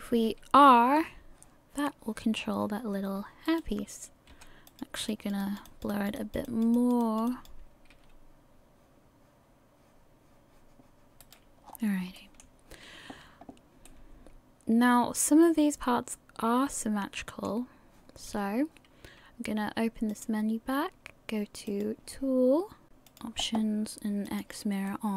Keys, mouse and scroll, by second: 0.2 r, 5.1 click, 5.4 click, 6.2 click, 6.8 click, 7.0 click, 7.9 r, 11.7-12.2 scroll down 5, 12.2 shift+middle click, 13.9 middle click, 20.1 click, 21.7 click, 24.3 click, 24.9 middle click.